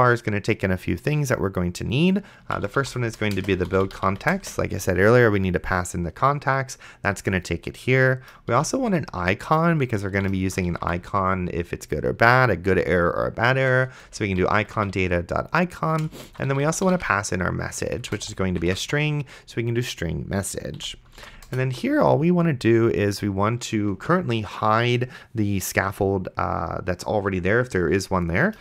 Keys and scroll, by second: 2.4-4.8 typing, 8.8-11.6 typing, 14.0-19.4 typing, 20.8 End, 21.5 shift+[, 21.5 Return.